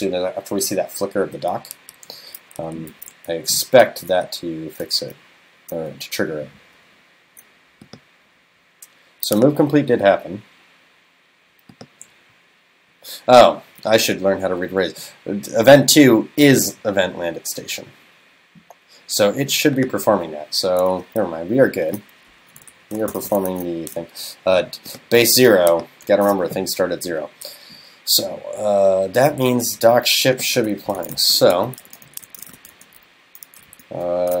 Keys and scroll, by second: 22.4 super+Right, 23.5 super+s.